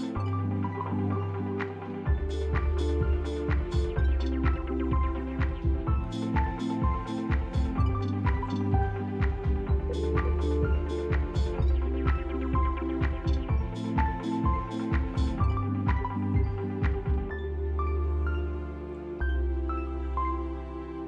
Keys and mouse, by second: 1.0-3.1 right drag, 3.8 ctrl+shift+z, 3.8 ctrl+F4, 4.3 click, 5.1 shift+click, 5.7-7.0 right drag, 8.3 Tab, 9.3 click, 10.9-12.5 drag, 13.5 click, 15.2 middle click, 17.9-20.0 drag, 20.1 ctrl+z.